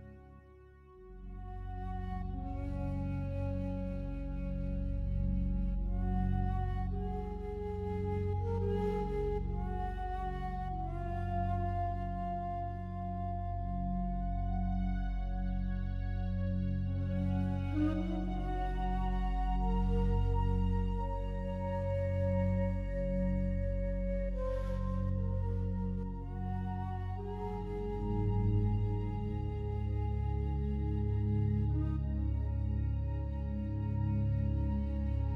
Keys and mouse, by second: 0.2 alt+shift+drag, 0.8-1.1 alt+drag, 4.2 click, 5.0 click, 5.6 alt+click, 6.3 click, 6.7 click, 7.3 click, 9.1 click, 10.2 8, 10.5 Return, 11.1 click, 11.9 typing, 12.3 Return, 14.5 click, 16.2 click, 17.3 click, 18.2 click, 18.7 drag, 19.0 click, 19.6 click, 19.6 typing, 20.3 click, 20.6 click, 21.2 click, 21.5 click, 22.0 click, 22.3 click, 23.0-23.8 typing, 25.3 click, 25.9 drag, 26.4-27.0 drag, 27.3-27.9 drag, 29.4-30.3 drag, 31.2-33.3 drag, 34.0 click, 34.1 typing, 35.1 click.